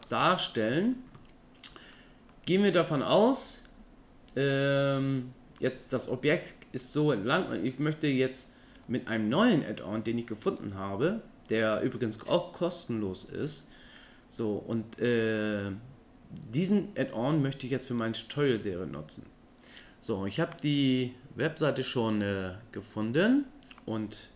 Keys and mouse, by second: 0.3 click, 2.0 middle click.